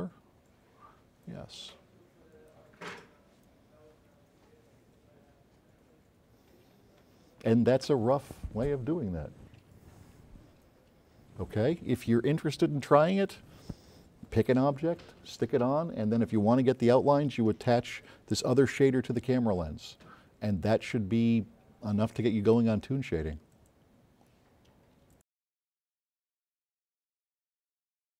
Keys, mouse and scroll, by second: 0.3 click, 1.4 click, 26.7 click.